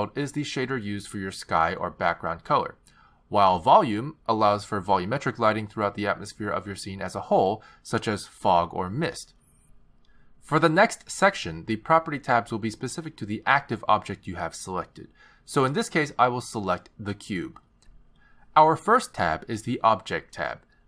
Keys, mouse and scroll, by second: 5.0 click, 6.3 click, 17.6 click, 20.3 click.